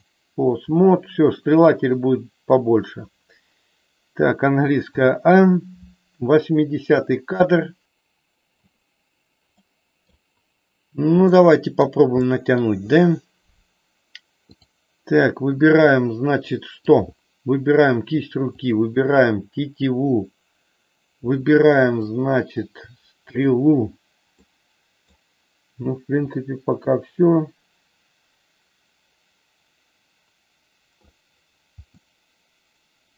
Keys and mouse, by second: 1.5 click, 4.8 a, 9.5 middle click, 11.3 middle click, 12.3 middle click, 15.9 middle click, 18.6 shift+click, 22.0 middle click, 23.3 shift+click, 24.4 middle click, 26.3-31.0 drag, 31.9-33.1 middle drag.